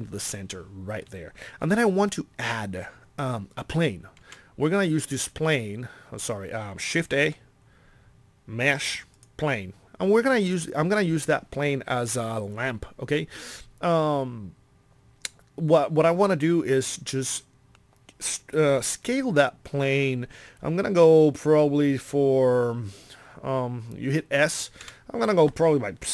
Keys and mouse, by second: 4.2 shift+a, 7.1 shift+a, 24.8 s.